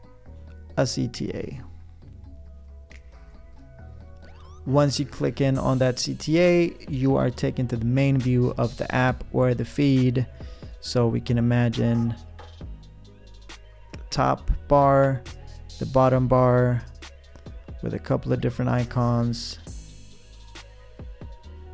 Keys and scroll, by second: 10.3 p.